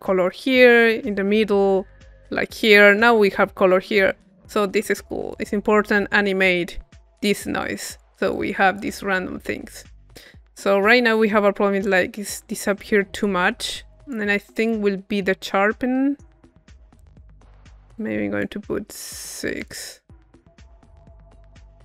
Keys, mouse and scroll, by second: 5.3-7.4 drag, 7.6-9.1 drag, 9.4-11.1 drag, 11.1 middle click, 11.9 click, 12.8-14.8 drag, 15.3 middle click, 16.7 click, 17.9-19.0 drag, 19.6-21.6 drag.